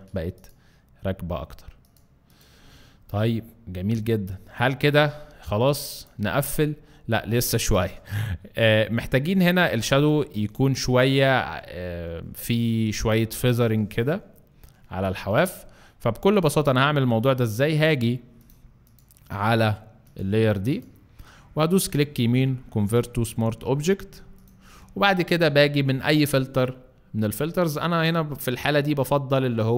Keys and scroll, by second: 5.5 alt+space, 6.2 alt+space, 9.9 space, 14.8 alt+space.